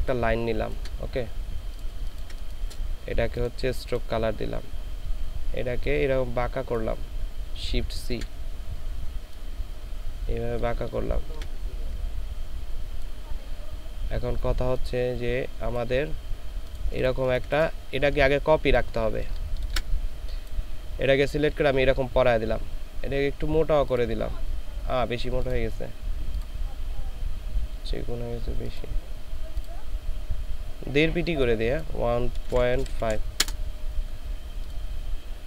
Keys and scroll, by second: 2.0 ctrl+space, 8.1 shift+c, 17.1 ctrl+space, 17.9 ctrl+alt+space, 19.0 ctrl+alt+shift+space, 32.5 KP_1, 32.8 KP_Decimal, 33.0 KP_5, 33.4 Return.